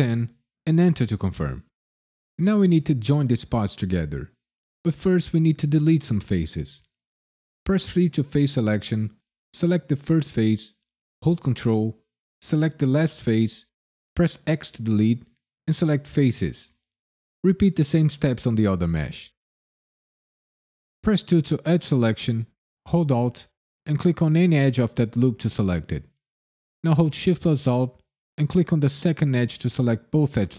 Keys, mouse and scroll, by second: 0.2 KP_0, 0.6 KP_Enter, 7.9 3, 9.9 click, 12.8 ctrl+click, 13.0 ctrl+click, 14.3 x, 16.9 middle click, 18.0 click, 18.6 ctrl+click, 19.4 x, 21.3 2, 23.8 alt+click, 28.3 alt+shift+click.